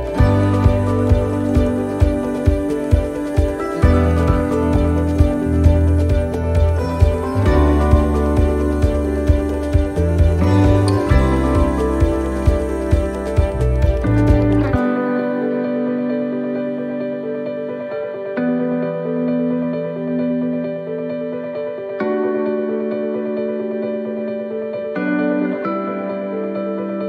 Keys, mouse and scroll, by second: 7.9 ctrl+z, 14.9 ctrl+z, 17.2 right click, 18.2 shift+right click, 21.3 click.